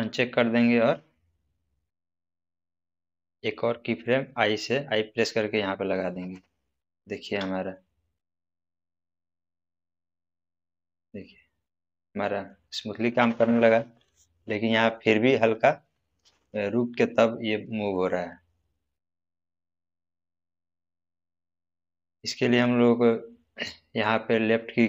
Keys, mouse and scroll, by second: 5.1 click, 7.1 space, 19.5-20.8 middle drag.